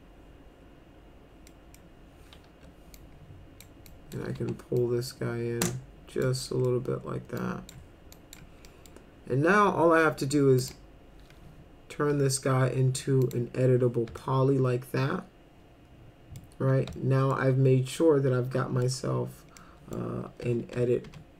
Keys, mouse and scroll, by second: 1.5 middle drag, 2.5 1, 3.0 click, 3.9 click, 4.4 w, 4.8-6.2 drag, 6.5 middle click, 7.4 click, 8.1 ctrl+click, 8.7 middle drag, 10.6 click, 12.1 e, 13.2 click, 14.2-16.4 alt+middle drag, 16.9 alt+middle click, 18.0 middle click, 19.6 middle click, 20.4 F4, 20.7 F3, 21.0 F3.